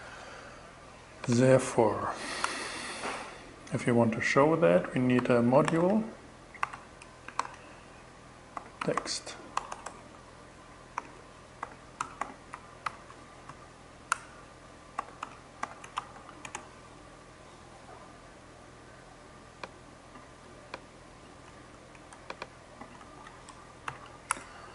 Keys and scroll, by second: 1.9 Return, 2.6 shift+Return, 4.4-6.2 typing, 6.8 alt+5, 8.0 alt+t, 8.3 x, 9.0 BackSpace, 9.6 alt+BackSpace, 10.4 alt+8, 11.1 alt+t, 11.2-12.1 typing, 12.3 alt+9, 12.9 alt+,, 13.6 Return, 14.2-16.7 typing, 21.4 super+x, 22.4 super+v, 23.3 shift+super+,, 23.7 shift+Return, 24.5 Return.